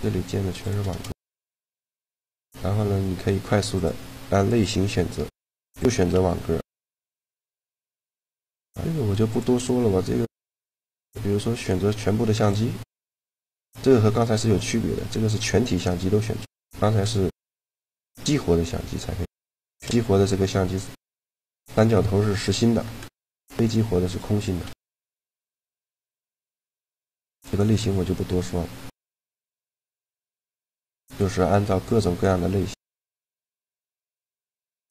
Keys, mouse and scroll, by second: 0.9 g, 1.5 a, 3.4-5.2 drag, 5.9 g, 6.8 click, 9.0 click, 12.8 click, 13.4 g, 14.9 g, 16.2 g, 17.6-19.8 right drag, 23.8-26.3 drag, 25.1 a, 26.6 click, 27.2-28.3 drag, 32.4 click, 32.8 shift+a, 34.7 click.